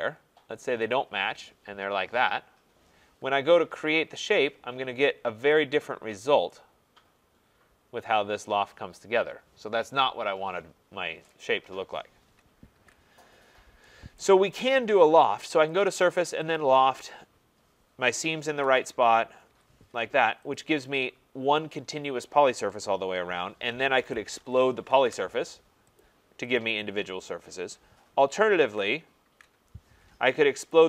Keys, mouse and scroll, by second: 1.0 click, 3.7 Return, 5.5 click, 6.1 middle click, 6.2 middle click, 11.3 right click, 12.7 ctrl+z, 13.4 middle click, 13.4 middle click, 13.5 middle click, 14.2 right click, 15.8 click, 16.6 click, 18.6 Return, 19.4 Return, 20.6 click, 24.0-25.0 typing, 26.0 click, 26.6 click, 28.6 ctrl+z, 29.2 ctrl+z, 30.7 click.